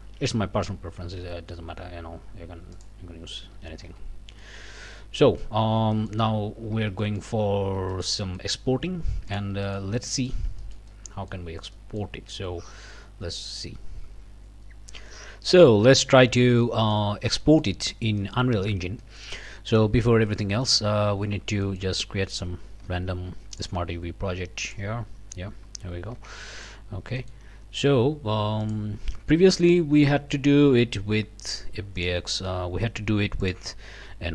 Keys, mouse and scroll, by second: 1.0 ctrl+e, 2.7 click, 3.1 scroll down 2, 3.5 alt+a, 3.9 alt+Tab, 4.4-5.6 alt+drag, 5.6 scroll down 2, 5.9 click, 6.3 scroll up 1, 6.7 alt+a, 7.0 alt+click, 7.5 alt+scroll up 1, 7.9 shift+click, 8.7 shift+scroll up 1, 9.3 shift+click, 9.6 shift+click, 10.6 shift+click, 11.7 click, 14.4 click, 15.7 click, 16.1 scroll up 2, 16.7 middle click, 17.2 scroll down 2, 17.4 middle click, 17.8-18.6 scroll up 4, 18.6 scroll down 2, 19.0 middle click, 19.9 scroll up 2, 20.3 Tab, 20.6 middle click, 20.9 scroll up 2, 21.0 a, 21.6 middle click, 21.8 click, 22.0 a, 22.8 u, 23.5 click, 24.6 click, 25.1 scroll up 1, 25.6 scroll down 1, 26.2 Tab, 26.5 click, 26.8 scroll down 1, 27.2 click, 28.6 click, 31.9 click, 33.4 click.